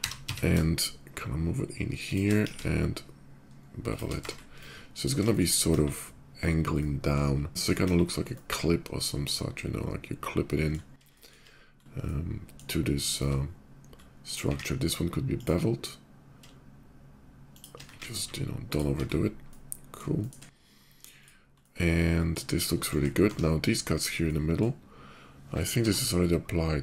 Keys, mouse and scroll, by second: 0.3 x, 1.8 shift+click, 2.1 b, 3.3 ctrl+shift+b, 3.4 middle click, 3.6 click, 3.9 Tab, 4.2 middle drag, 4.6-6.2 middle drag, 5.6 KP_5, 6.3 middle click, 7.3 /, 7.4-11.6 middle drag, 7.6 KP_5, 11.9-12.5 shift+middle drag, 12.8 shift+middle drag, 13.2 shift+middle click, 13.7 shift+middle click, 13.9 shift+click, 14.2 q, 15.1 click, 17.3 shift+click, 17.5 q, 18.2 alt+q, 18.4 click, 18.8 middle drag, 19.2-19.7 middle drag, 19.9 shift+middle drag, 20.9 shift+click, 21.3-22.1 shift+middle drag, 22.9 Tab, 23.7 middle click, 23.9 middle click, 25.5 k.